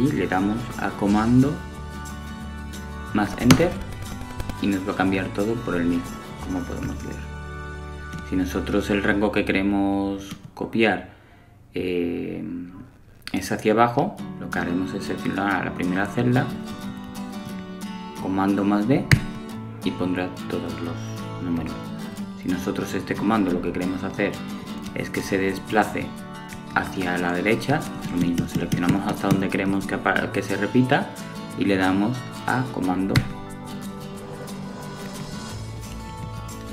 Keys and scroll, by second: 16.0 super+d, 33.7 super+r.